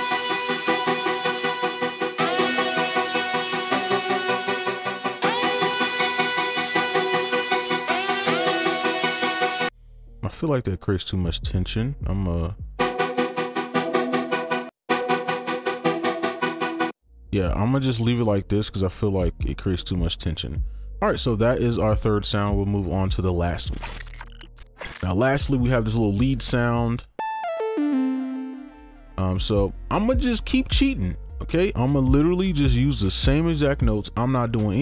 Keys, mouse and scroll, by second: 0.6 ctrl+click, 2.2 ctrl+click, 2.9 shift+click, 4.4 right click, 9.7 space, 12.6 right click, 12.8 space, 14.7 space, 14.7 right click, 16.9 space, 17.1 right click, 17.9 ctrl+click, 19.9 alt+2, 20.3 right click, 27.4 double click.